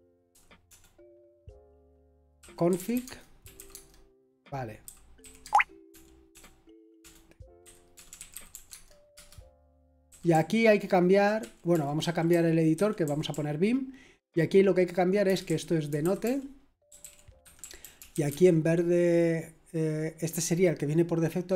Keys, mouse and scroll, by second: 0.0-0.6 typing, 2.1-13.9 typing, 15.0-20.0 typing.